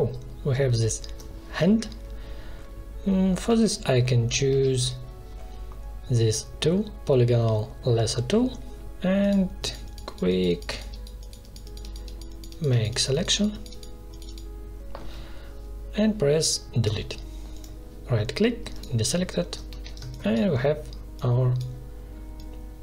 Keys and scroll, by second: 3.4 v, 4.4 l, 16.8 Delete, 19.6 v, 19.9 space.